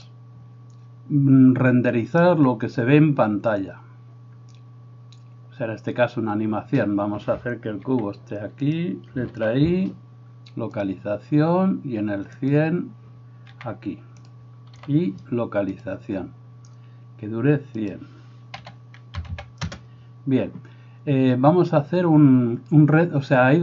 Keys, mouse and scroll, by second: 7.9 g, 9.4 i, 12.5-14.3 drag, 13.5 g, 14.8 i, 17.8-23.6 drag, 19.4 0.